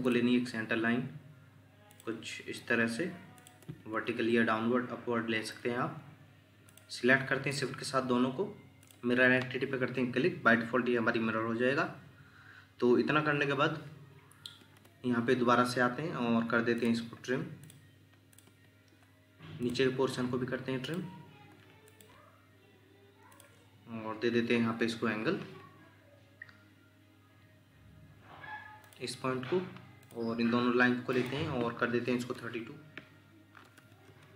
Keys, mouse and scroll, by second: 3.6 Escape, 7.5 shift+click, 14.6 Escape, 14.8 Escape, 18.4 Escape, 33.7-34.0 typing, 34.1 Return.